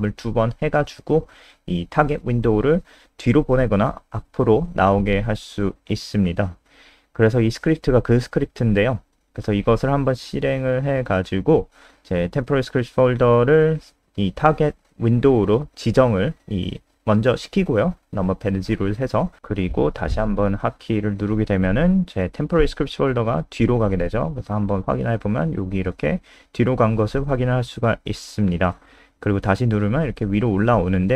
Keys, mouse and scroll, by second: 0.8 click, 8.9 ctrl+s, 9.6 scroll up 2, 9.9 F5, 12.3 click, 15.8 KP_0, 25.1 click, 27.1 click, 28.2 KP_0, 29.3-30.5 scroll down 4.